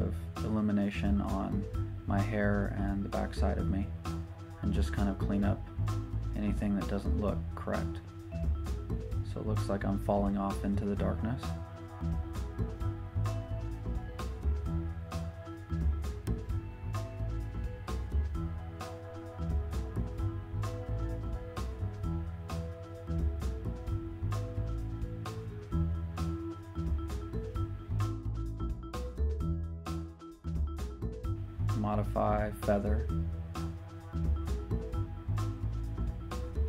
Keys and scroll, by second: 1.1 typing, 9.0 z, 35.4 2, 35.5 Return.